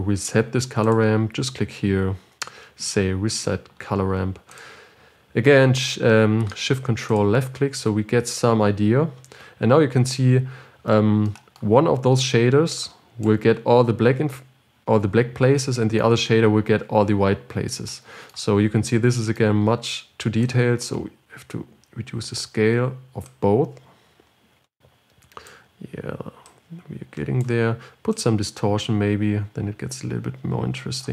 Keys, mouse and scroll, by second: 5.1 click, 7.7 ctrl+shift+click, 13.2-31.1 drag.